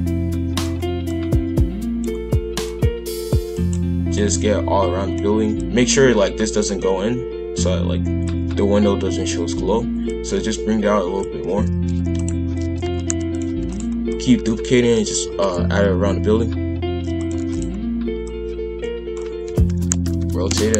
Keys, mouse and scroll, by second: 1.1 click, 2.6 click, 4.1 click, 5.6 click, 10.0 click, 11.7 shift+f, 12.6 shift+f, 13.6 shift+d, 14.1 click, 15.2 shift+f, 17.3 shift+d, 18.2 click, 19.4 r.